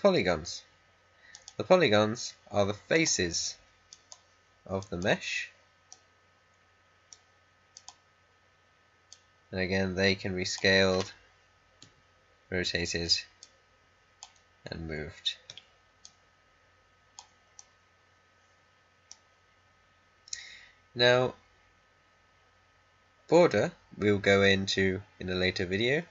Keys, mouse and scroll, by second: 1.2 click, 5.8-7.7 middle drag, 7.7-11.7 drag, 11.7 e, 13.3-15.4 drag, 15.4 w, 15.9 click, 17.5-19.5 middle drag, 19.5-19.9 scroll up 1.